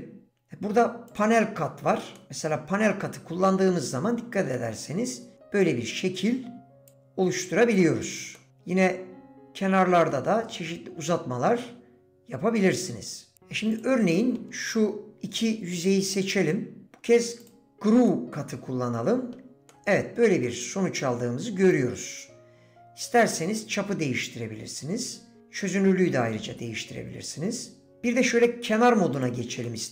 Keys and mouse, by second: 2.2-4.5 middle drag, 5.6-6.9 drag, 7.0 click, 8.4 middle click, 8.5-13.3 drag, 14.1 click, 18.1-19.4 middle drag, 19.7 middle click, 22.1-27.9 drag, 28.6 2, 29.6 middle click.